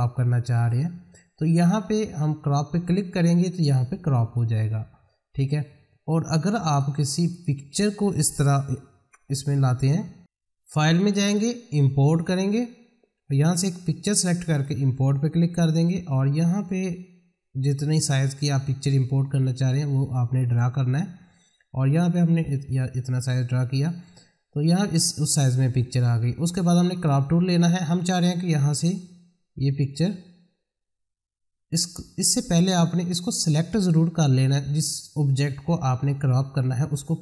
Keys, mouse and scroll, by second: 3.5 click, 6.6 click, 10.2-24.6 drag, 26.9 click, 33.0 click.